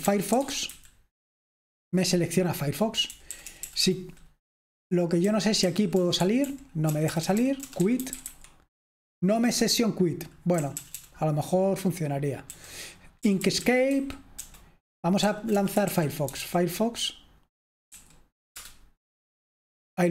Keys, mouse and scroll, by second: 0.0-20.1 typing, 18.5 Return.